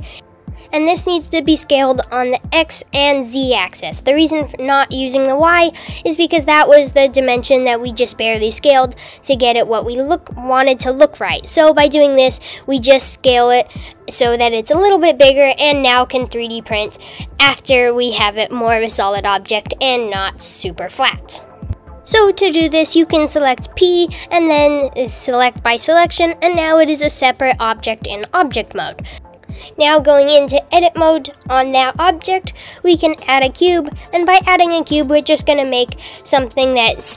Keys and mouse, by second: 21.7 super+z, 23.1 p, 24.7 Tab, 31.8 Tab, 33.0 shift+a.